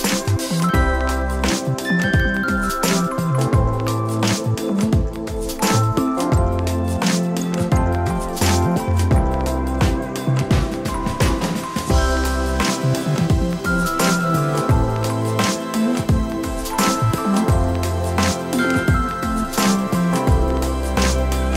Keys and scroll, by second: 1.3 Tab, 4.3 Tab, 10.7 l, 11.3 h, 15.8 x, 18.7 alt+h.